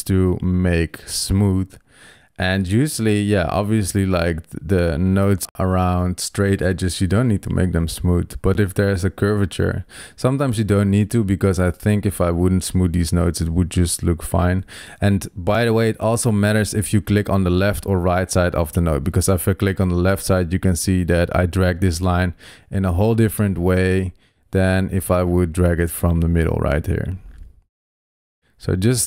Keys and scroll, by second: 14.7 super+z, 21.9 super+z, 25.1 super+z.